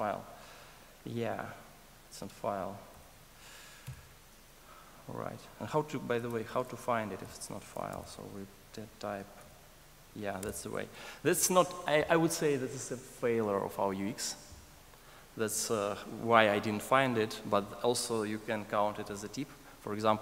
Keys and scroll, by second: 4.0 super+Down, 6.4 super+Down, 6.5 alt+super+[, 7.9 ctrl+shift+super+o.